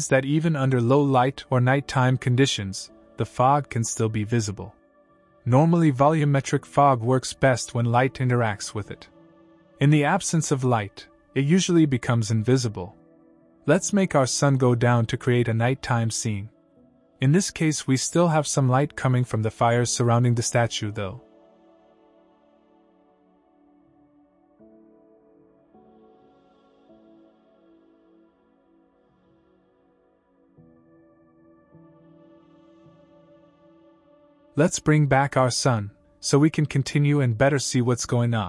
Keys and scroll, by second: 14.4 ctrl+l, 34.4 ctrl+l.